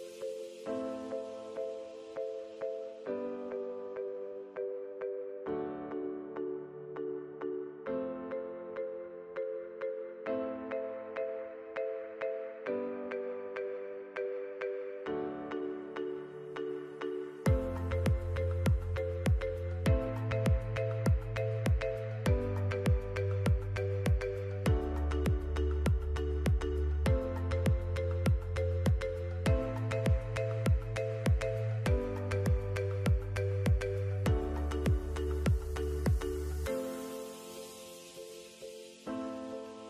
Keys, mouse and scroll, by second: 3.3 click, 7.8 shift+click, 8.7 z, 10.4 shift+click, 11.7 alt+scroll up 2, 14.2 click, 20.1 alt+scroll down 1, 20.8 click, 21.6 alt+scroll up 2, 22.6 click, 23.1 shift+click, 26.0 click, 29.2 right click, 31.3 click, 35.0 click, 38.3 click.